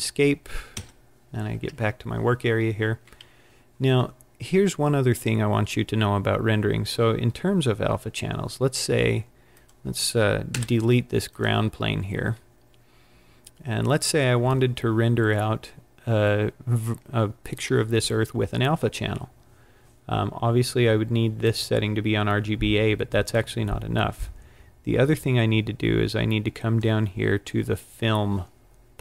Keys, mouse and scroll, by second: 0.6 Escape, 6.3 scroll down 1, 9.6 click, 10.5 Delete, 21.3 click, 24.1 click.